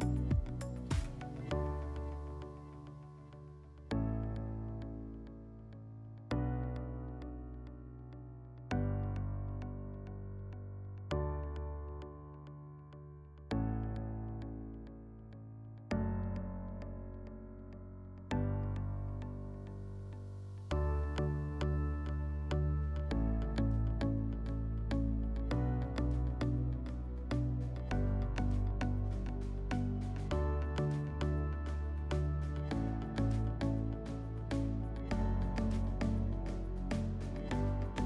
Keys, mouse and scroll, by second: 0.6 middle click, 1.3 middle click, 16.5 click, 17.5 middle click, 18.5 click, 20.4 scroll, 22.1 click, 22.8 click, 24.7 click, 25.5 click, 26.3 click, 27.1 click, 28.9 click, 29.4 ctrl+z, 29.7 ctrl+z, 29.9 ctrl+z, 32.3 click, 33.2 click, 36.1 middle click.